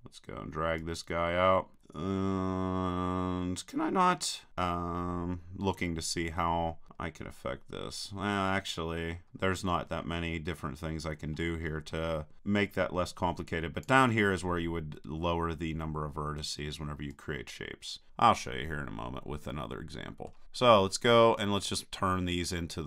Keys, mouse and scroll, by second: 0.8-1.8 drag, 1.8-5.6 middle drag, 6.9-9.3 middle drag, 6.9-8.4 scroll down 1, 8.4-9.1 scroll down 1, 9.1 scroll up 1, 10.3-12.4 middle drag, 12.4-13.9 drag, 17.1-18.8 drag, 19.5-21.1 middle drag, 21.4-22.8 drag.